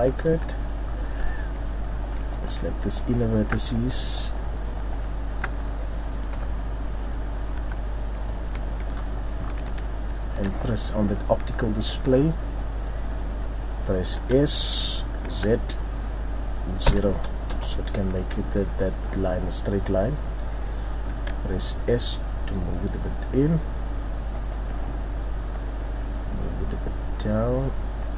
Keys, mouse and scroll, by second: 0.2 Tab, 0.4-1.0 scroll down 3, 0.8-1.4 scroll up 2, 1.0 Tab, 2.0 right click, 2.3 alt+right click, 3.0 right click, 3.7 alt+right click, 3.9 alt+right click, 5.6 scroll down 3, 6.3 KP_3, 7.6 z, 8.2-8.9 scroll down 3, 9.0-9.8 scroll up 4, 10.2 shift+scroll down 2, 11.8 click, 19.9-20.7 scroll up 1, 21.1 s, 24.5 click.